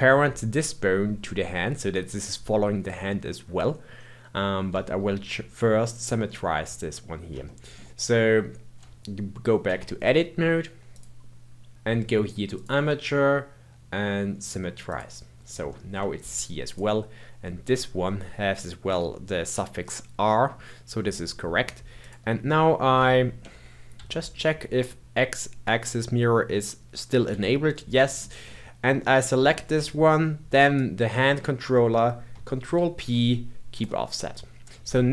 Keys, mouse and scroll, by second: 4.8-5.5 shift+middle drag, 5.5-6.2 scroll down 2, 6.2-9.6 middle drag, 9.6 Tab, 10.9 click, 12.5-15.5 drag, 15.7-16.7 shift+middle drag, 16.7 click, 22.0 click, 22.4-23.9 middle drag, 23.9 n, 27.3 n, 28.0-28.4 scroll up 1, 28.4-30.6 middle drag, 30.6 shift+click, 32.6 ctrl+p.